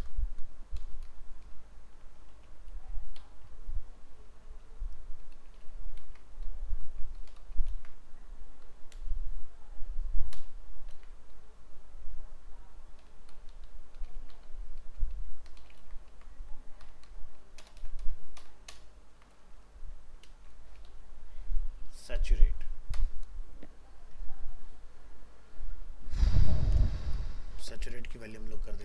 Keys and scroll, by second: 5.3 ctrl+shift+Left, 5.6 ctrl+c, 7.3 ctrl+Right, 7.4 ctrl+shift+Left, 7.7 ctrl+v, 10.9 ctrl+v, 14.2 ctrl+c, 15.8 ctrl+v, 17.6 ctrl+BackSpace, 20.3 ctrl+space, 27.7 ctrl+shift+Left, 28.0 ctrl+c.